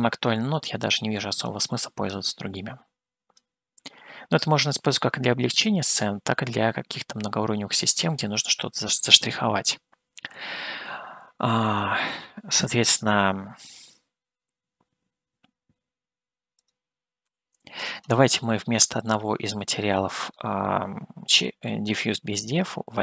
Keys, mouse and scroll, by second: 0.4-1.8 drag, 2.2-3.4 drag, 4.8-8.9 middle drag, 17.0-18.0 drag, 18.6-20.6 middle drag.